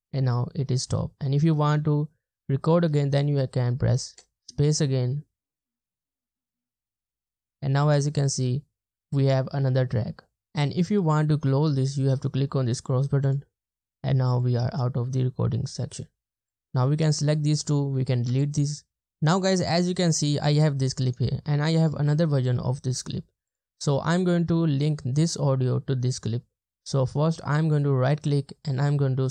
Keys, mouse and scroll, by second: 4.1 space, 18.3 BackSpace, 27.3 right click.